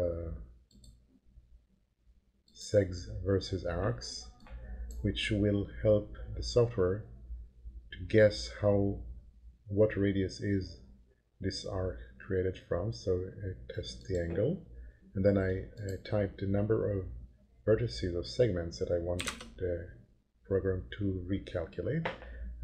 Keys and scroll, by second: 19.2 1, 19.8 0.